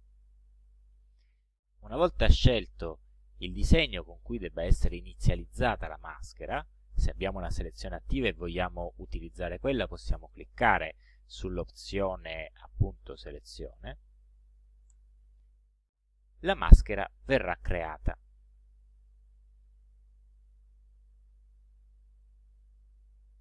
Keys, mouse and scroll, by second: 0.0 click, 9.9 click, 15.0 click, 20.6 click, 21.6 click.